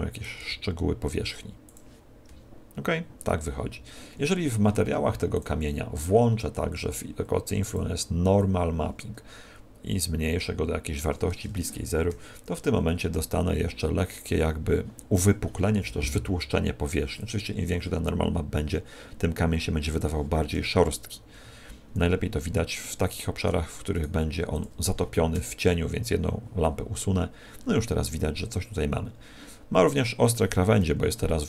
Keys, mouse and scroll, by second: 1.7 click, 21.3 Escape, 22.3-22.8 scroll down 5, 22.8 middle click, 23.9 right click, 24.3 x, 30.8 Escape.